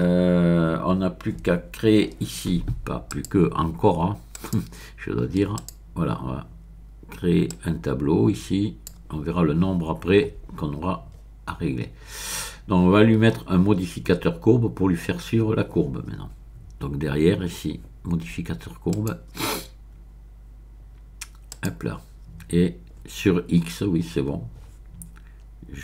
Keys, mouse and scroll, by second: 3.1 click, 4.3 click, 5.5 click, 7.5-9.2 drag, 10.4-11.1 scroll down 1, 11.1-11.9 scroll up 1, 18.9 click, 21.5 click, 22.6-23.3 scroll down 1.